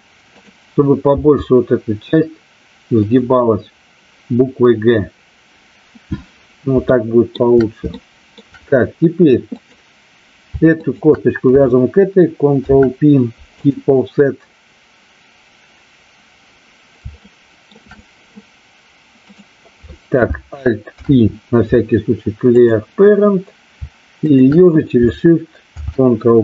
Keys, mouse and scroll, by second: 0.2 click, 1.1 g, 3.0 click, 6.9 shift+middle click, 8.0 shift+middle click, 9.5 click, 10.7 shift+click, 17.2 shift+middle click, 19.2 click, 21.0 alt+p, 24.2 shift+click, 25.7 ctrl+p.